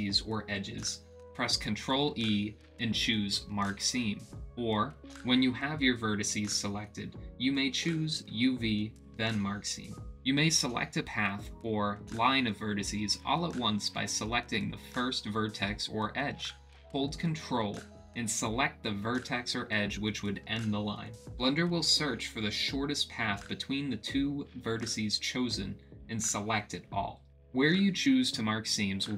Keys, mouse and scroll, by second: 1.5 ctrl+click, 2.8 ctrl+e, 4.8 middle click, 4.8 click, 5.0 middle click, 6.7 middle click, 7.8 middle click, 8.8 middle click, 9.5 ctrl+click, 10.2 ctrl+e, 10.7 middle click, 11.3 middle click, 11.9 click, 12.0 middle click, 13.4 ctrl+click, 16.7 middle click, 17.0 middle click, 17.5 ctrl+e, 17.8 middle click, 20.0 ctrl+click, 20.4 ctrl+x, 21.0 ctrl+z, 21.7 ctrl+z, 21.7 ctrl+click, 23.7 ctrl+click, 23.8 middle click, 25.5 ctrl+e, 26.3 middle click, 27.6 click, 28.5 ctrl+middle click, 28.8 ctrl+z.